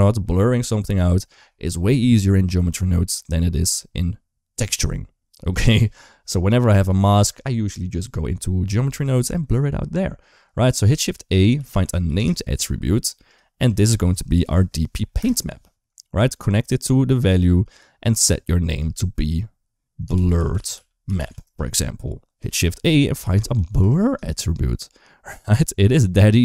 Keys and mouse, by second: 7.8 shift+middle click, 10.7 shift+a, 13.5-15.0 drag, 15.8 click, 16.4 click, 17.9-21.3 drag, 20.3 r, 22.4 shift+a.